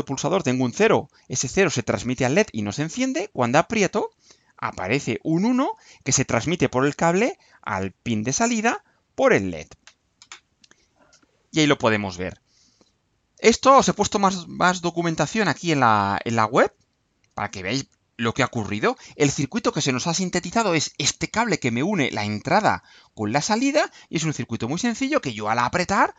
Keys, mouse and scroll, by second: 12.9 click, 13.5-14.5 scroll down 2, 15.0-18.5 drag.